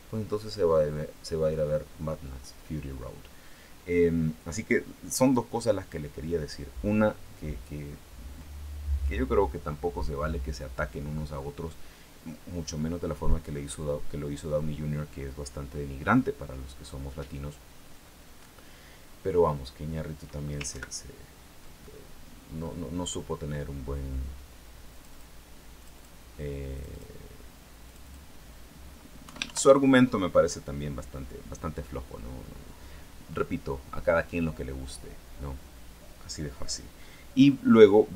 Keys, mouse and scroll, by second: 20.5 ctrl+Right, 21.6-22.0 ctrl+scroll down 3, 22.4-22.7 scroll up 2, 22.8 scroll down 2, 24.7 click, 25.6 click, 26.5 click, 27.6 click, 29.0 Home.